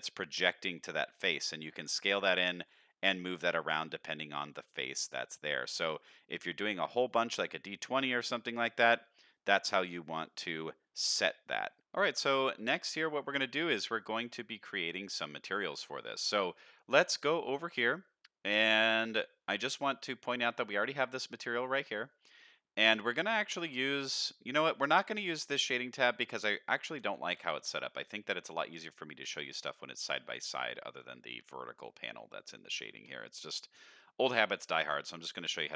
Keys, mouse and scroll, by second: 1.0 middle click, 2.5 g, 6.9 middle click, 8.1-8.5 middle drag, 9.3 middle drag, 10.0 middle click, 11.0 shift+middle drag, 11.7 middle click, 12.9-13.3 middle drag, 13.5 shift+middle click, 13.9-14.5 middle drag, 14.8 middle drag, 15.7-16.1 middle drag, 17.6 click, 19.1 click, 27.6 shift+middle click, 27.9 n, 29.0 shift+middle drag, 30.1 shift+middle click, 34.1-35.7 drag.